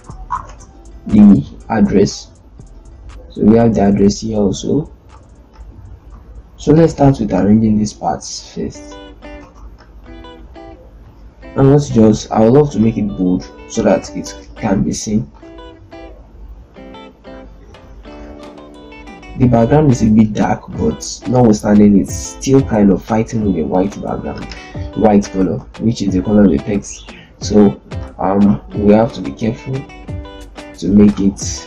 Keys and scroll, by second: 0.1 w, 0.2 Return, 6.1 z, 9.3 ctrl+space, 11.0 l, 29.9 z.